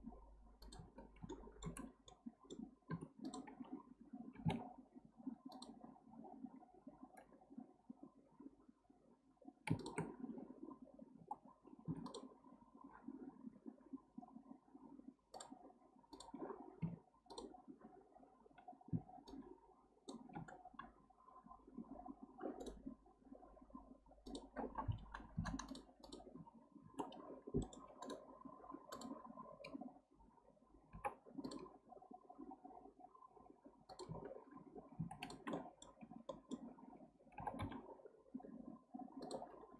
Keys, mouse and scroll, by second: 1.3-1.8 shift+middle drag, 1.8 scroll up 1, 2.1 middle click, 2.9 2, 3.2 click, 4.3 g, 6.0-6.5 scroll up 1, 6.5-8.2 scroll down 1, 9.8 shift+click, 11.2 f, 12.0 click, 15.3-16.8 drag, 16.8 1, 17.3 click, 19.3-22.4 shift+drag, 24.3-25.7 drag, 26.0-27.6 drag, 27.6-28.0 middle drag, 28.0-28.9 right drag, 28.9 drag, 30.9 k, 35.2 click, 35.5-36.7 middle drag, 36.7-37.3 scroll down 1, 37.3 g, 39.5-39.7 scroll down 1.